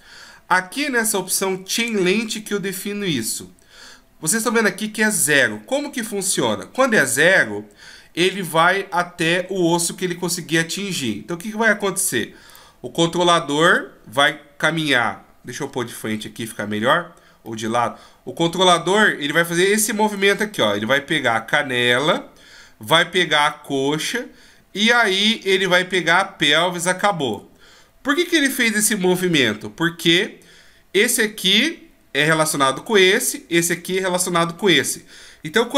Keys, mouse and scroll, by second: 12.5 right click, 16.1 KP_1, 17.4 middle click, 19.9 d, 20.2 click, 27.3 d.